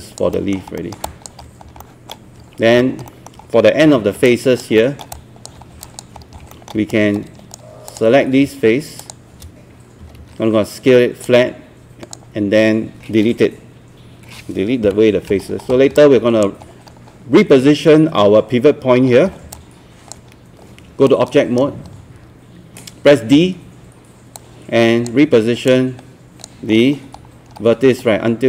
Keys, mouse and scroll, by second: 0.1 alt+click, 0.3 alt+middle click, 0.8 alt+middle click, 1.1 alt+click, 1.6 scroll up 1, 1.8 alt+middle click, 2.6 scroll down 1, 3.0 alt+scroll up 1, 3.1 alt+middle click, 3.9 alt+1, 4.3 alt+click, 4.8 alt+middle click, 5.1 alt+click, 5.9 alt+click, 6.2 scroll up 1, 6.5 alt+middle click, 6.9 right click, 7.9 click, 9.0 shift+click, 9.8-10.7 typing, 11.3 click, 14.9 Delete, 15.5 scroll down 1, 16.0 alt+click, 16.7 scroll up 1, 19.1 scroll down 1, 19.5 alt+click, 21.1 right click, 23.3 d, 24.4-26.7 drag, 26.7 scroll up 1, 28.1 scroll down 1.